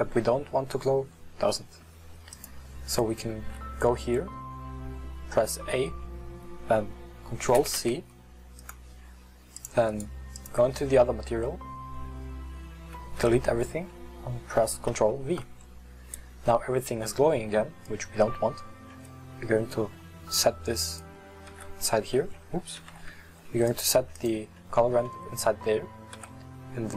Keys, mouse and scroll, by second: 2.3 click, 10.4 click, 13.2 x, 14.9 ctrl+v, 17.8 middle drag, 18.0 click, 21.0 click, 21.6 x, 23.7 ctrl+z, 24.2 click, 26.2 x.